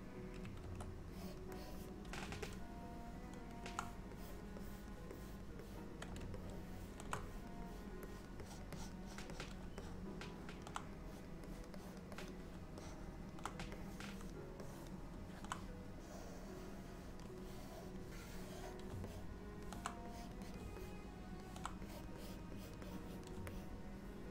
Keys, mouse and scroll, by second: 0.7 ctrl+z, 1.2 click, 1.6 click, 2.5 middle click, 4.2 click, 4.7 click, 5.2 click, 5.7 click, 6.4 shift+middle click, 7.3 click, 7.7 click, 8.1 click, 8.5 click, 8.8 click, 9.1 click, 9.4 click, 9.8 middle click, 11.1 click, 11.5 click, 11.8 click, 12.2 click, 12.8 middle click, 13.8 click, 14.7 click, 16.1 click, 17.5 click, 18.2 click, 19.2 middle click, 20.2 click, 20.5 click, 20.9 middle click, 21.9 click, 22.3 click, 22.6 click, 22.9 click, 23.6 middle click.